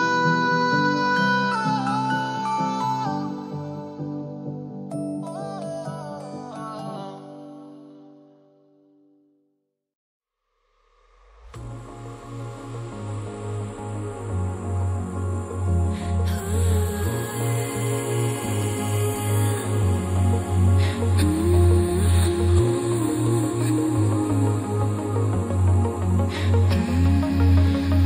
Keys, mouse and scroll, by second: 0.0 click, 0.4-0.8 scroll down 1, 0.8 click, 1.1-1.5 scroll up 1, 1.6 click, 2.2 double click, 2.5 click, 2.7 double click, 3.7 scroll down 1, 4.3 click, 20.5 click, 23.0-23.7 scroll up 1, 23.7 click, 26.3 click.